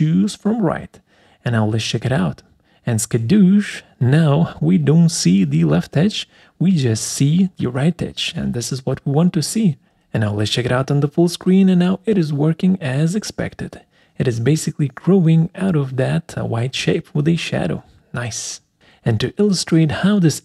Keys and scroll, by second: 18.4 Escape.